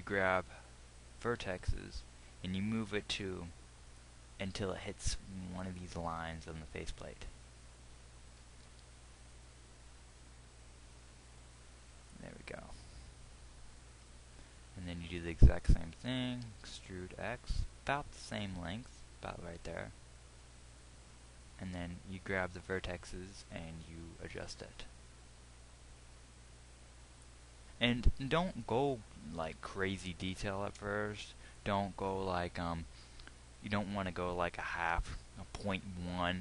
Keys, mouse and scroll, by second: 1.6 g, 4.7 g, 8.8 g, 16.9 e, 24.8 g, 29.7 g.